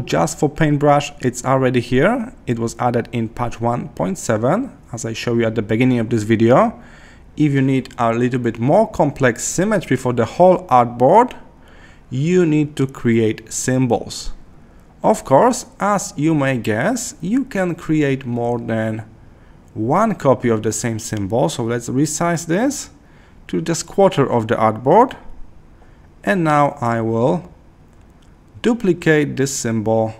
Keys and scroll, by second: 12.3 Left, 16.8 Left, 17.9 Left, 19.0 Left.